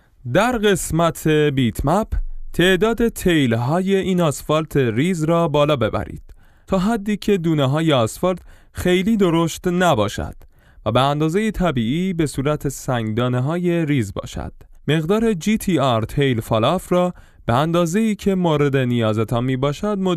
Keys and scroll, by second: 6.6 F11, 13.0-15.9 typing, 19.1 alt+Tab.